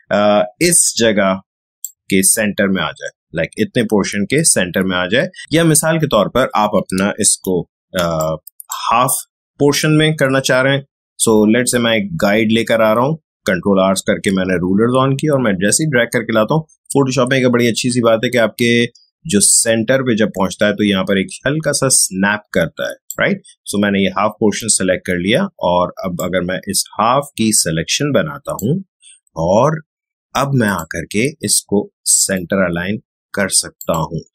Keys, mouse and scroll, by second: 5.4 click, 5.5 space, 7.3 ctrl+r, 7.9 space, 8.1 click, 8.2 click, 8.4 space, 11.6-21.6 drag, 26.5-30.6 drag.